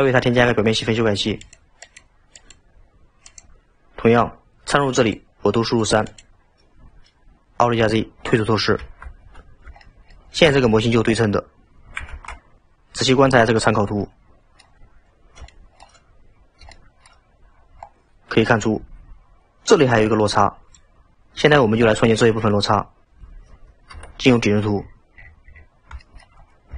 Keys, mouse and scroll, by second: 1.5 click, 1.9 click, 2.4-5.3 drag, 5.9-6.7 drag, 8.8 alt+z, 9.5-9.8 scroll up 2, 9.8-12.2 shift+middle drag, 12.2 alt+z, 13.8-16.2 middle drag, 16.2-16.7 scroll up 5, 16.7 shift+middle click, 17.2-23.2 scroll up 15, 23.9 KP_7, 24.8-26.1 scroll down 26, 26.1 shift+middle drag, 26.4-26.7 scroll up 7.